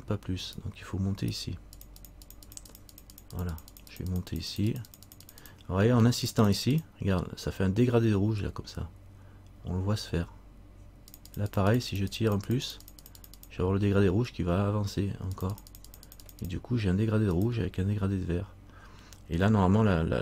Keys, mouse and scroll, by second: 0.6 right click, 1.4 right click, 1.9 click, 2.6-10.4 click, 11.3-20.2 click.